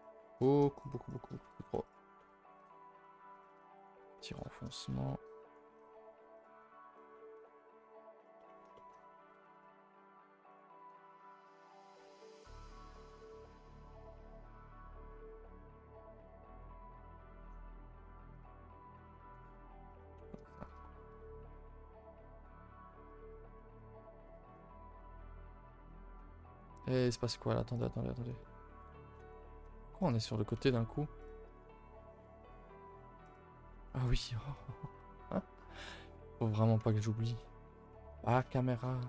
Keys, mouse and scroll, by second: 2.2 middle click, 2.7 scroll up 4, 3.1 z, 3.7 shift+middle click, 3.8-4.7 scroll up 5, 4.2 middle click, 4.7-5.8 shift+middle drag, 5.8 r, 6.6 middle click, 7.3 e, 8.4 middle click, 9.0-9.3 scroll up 4, 9.3 s, 11.5 click, 11.9 scroll down 5, 12.2 Tab, 12.4-12.8 middle drag, 12.8 Tab, 12.9 middle click, 13.3 s, 14.5 Tab, 14.8-15.8 middle drag, 15.8 click, 16.2 Tab, 16.3 middle click, 16.6 scroll up 2, 16.9 s, 19.0 alt+click, 19.9 alt+click, 20.6 shift+click, 21.6 KP_4, 22.1 KP_4, 22.3 KP_1, 27.0 click, 33.2 click, 34.2 KP_0, 36.1 scroll up 1, 36.3 click, 37.8 alt+click, 38.5 shift+middle click, 38.9 scroll up 1.